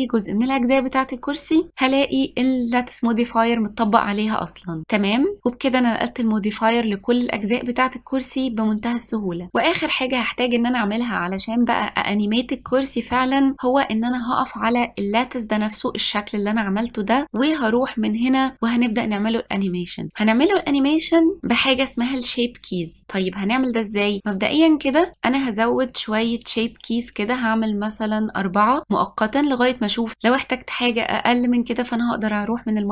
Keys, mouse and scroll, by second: 4.8 click, 12.8-14.7 middle drag, 14.7 click, 17.8 click, 25.1-29.3 drag, 32.5-32.9 drag.